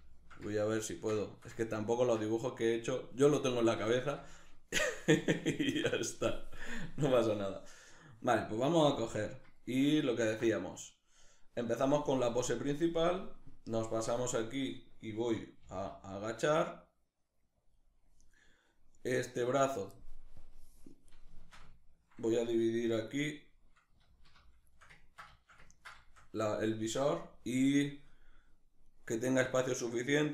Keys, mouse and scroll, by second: 8.8-9.7 right drag, 9.7-12.8 ctrl+middle drag, 11.9 a, 12.8-14.3 drag, 14.3 right click, 15.2 g, 17.4 click, 18.8-20.0 right drag, 20.0-21.0 drag, 21.0-28.5 shift+middle drag, 23.6 alt+q, 28.5 right click, 28.6-30.3 middle drag.